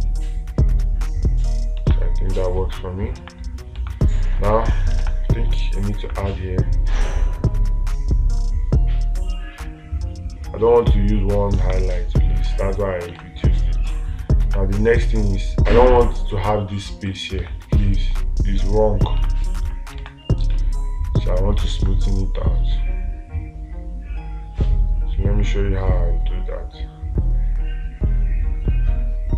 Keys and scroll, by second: 2.3 space, 4.3 space, 5.5 space, 12.0 space, 13.7 space, 17.9 space, 19.7 space, 20.5 space.